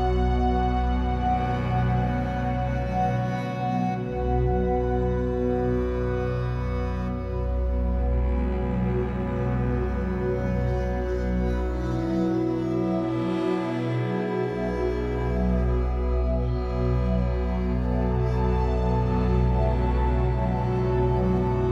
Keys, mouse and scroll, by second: 0.6 click, 1.0-2.4 shift+middle drag, 2.4 scroll up 1, 2.6-3.2 scroll down 4, 3.2 click, 3.4 g, 7.5 click, 8.2 click, 8.6 click, 8.9-10.9 scroll up 2, 10.9 click, 11.6 click, 12.7 click, 12.9-15.9 drag, 16.8-18.2 drag, 18.5 ctrl+s, 19.1 shift+middle click, 19.4 scroll up 2, 19.7 middle click, 20.5-21.7 drag.